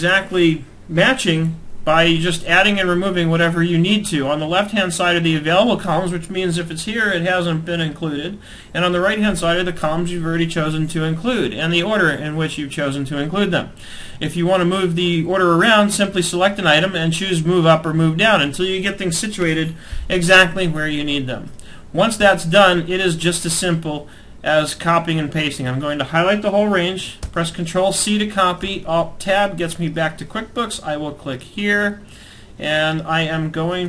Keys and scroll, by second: 21.7 alt+Tab, 26.7 ctrl+c, 28.6 alt+Tab.